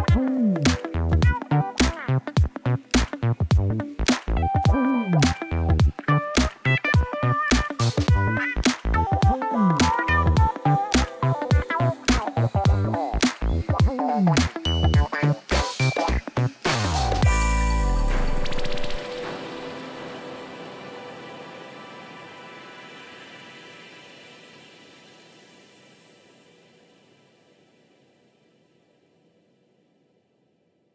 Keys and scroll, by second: 9.0 ., 9.2 3, 10.0 Return, 11.9 1, 12.1 3, 12.3 Return, 17.5 ., 17.7 5, 18.0 Return.